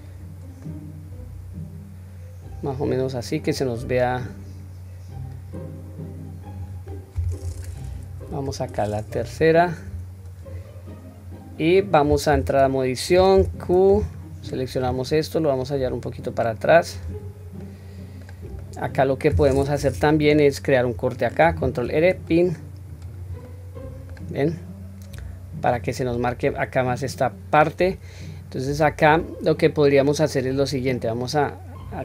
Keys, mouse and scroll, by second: 0.2-1.1 scroll down 2, 0.6-2.8 middle drag, 3.5 click, 6.9-7.4 middle drag, 8.3 KP_3, 8.9 scroll up 1, 9.7-10.0 scroll down 1, 11.3-11.8 scroll down 1, 12.3 Tab, 13.4 q, 13.8 drag, 14.4-14.9 drag, 15.6-16.9 drag, 17.6-18.2 middle drag, 18.6-19.3 middle drag, 20.1 q, 21.5 ctrl+r, 23.4 middle click, 24.5-25.7 middle drag, 26.4-32.0 middle drag.